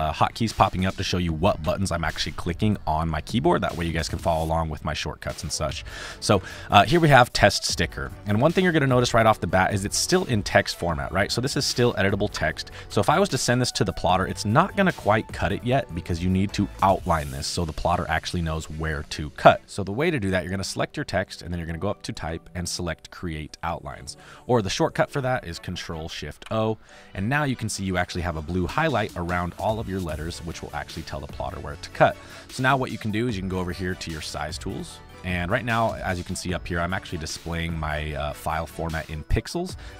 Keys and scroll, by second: 4.1 v, 7.5 space, 9.8 t, 12.3 BackSpace, 12.8 ctrl+z, 15.6 space, 25.0 ctrl+z, 26.4 ctrl+shift+o, 29.5 space, 32.1 space.